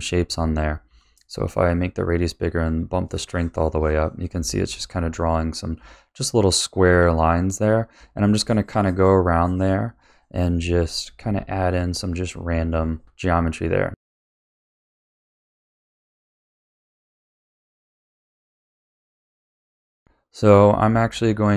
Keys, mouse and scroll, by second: 0.0 click, 2.3 click, 4.6-5.6 middle drag, 8.4 click, 9.4 click, 10.0 click, 10.8 click, 11.3 middle click, 11.9 click, 12.7 click, 13.3 middle click, 13.6 click, 13.9 middle click, 14.2 middle click, 14.5 click, 14.8 click, 15.1 middle click, 15.4 click, 15.7 click, 15.9 middle click, 16.1 click, 16.3 click, 16.6 middle click, 16.7 click, 17.0 click, 17.1 click, 17.4 middle click, 17.5 click, 17.8 middle click, 17.9 click, 18.1 click, 18.4 click, 18.7 click, 18.9 click, 19.1 middle click, 19.3 click, 19.6 middle click, 20.0-21.5 middle drag.